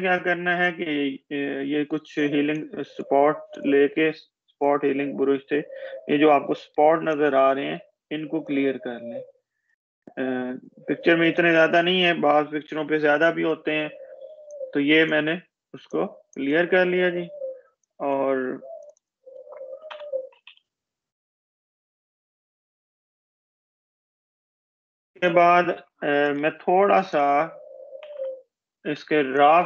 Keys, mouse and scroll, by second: 2.8-3.4 click, 8.1-9.4 space, 9.4 click, 9.5-10.0 space, 12.5 ctrl+-, 13.9 space, 14.1 click, 14.5 space, 15.5 click, 19.8 ctrl+-, 20.1 ctrl+=, 23.9-24.9 scroll down 1, 25.9 click, 28.4 ctrl+=, 29.5 space.